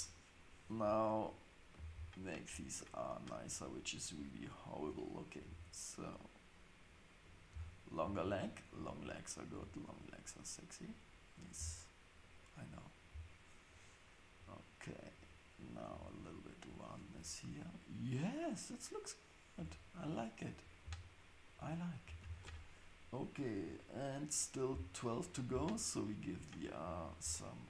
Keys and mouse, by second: 4.4 click, 5.4 g, 8.5 click, 9.5 g, 11.4 click, 15.9 g, 17.1 Tab, 20.6 Tab, 20.6 click, 22.2 ctrl+shift+s, 25.3 click, 26.5 shift+click.